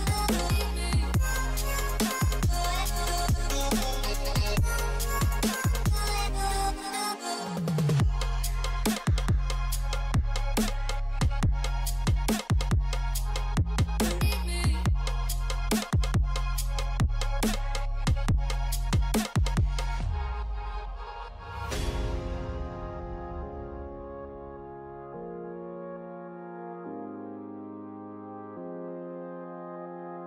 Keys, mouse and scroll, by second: 5.8 scroll up 1, 8.1 alt+scroll down 1, 12.5 alt+scroll up 1, 13.1-13.6 scroll up 1, 15.3 alt+scroll, 15.3 alt+scroll down 1, 15.7 scroll up 1, 16.3 alt+scroll, 16.5-17.3 scroll up 1, 17.4-17.7 alt+scroll down 1, 18.0 scroll down 1, 19.2-19.7 typing, 22.2-22.8 alt+scroll up 1, 23.2 scroll down 1, 23.5-24.1 typing, 24.7 alt+click, 27.3 alt+click, 28.3 alt+click.